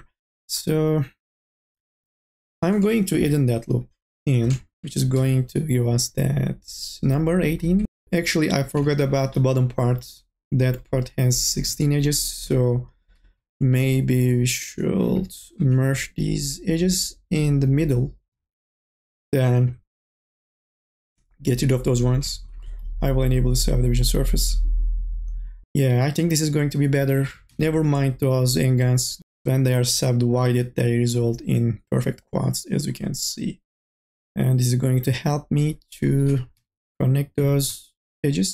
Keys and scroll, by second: 3.1 k, 3.6 l, 5.0 2, 5.5 e, 15.1 1, 27.5 e, 36.2 2, 36.6 e.